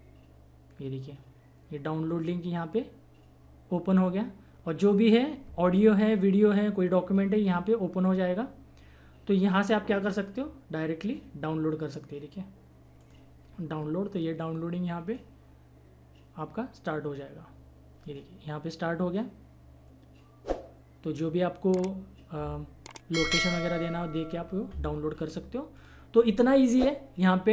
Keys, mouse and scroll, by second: 13.0 click, 25.7 click.